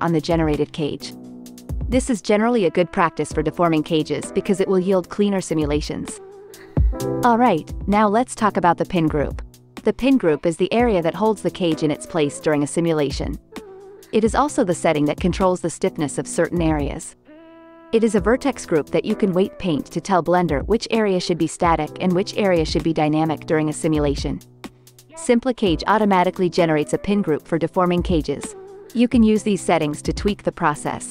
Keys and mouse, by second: 6.4-12.1 drag, 12.5 click, 14.7 KP_Divide, 22.2 shift+Left, 23.4 space, 23.9 space, 24.4 shift+Left, 25.2-27.2 alt+drag, 26.1 space, 27.4 space, 27.7 shift+click, 27.9 shift+Left, 29.3-31.1 drag, 29.3 space, 30.4 space.